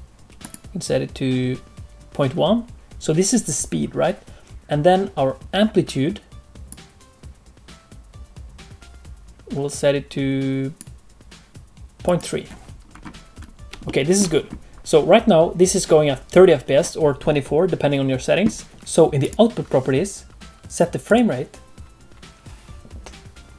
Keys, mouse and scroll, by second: 0.4 click, 6.6 click, 12.0 click, 12.9-13.6 scroll up 2, 13.8 shift+middle click, 18.7 click, 18.7 space, 19.2 click, 21.0 click.